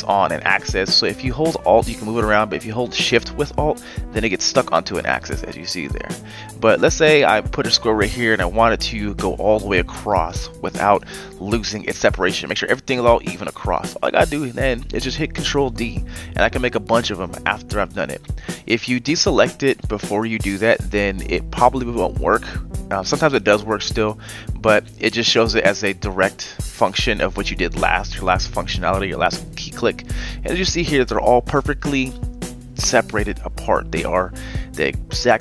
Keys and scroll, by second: 13.9 ctrl+d, 14.1 ctrl+d.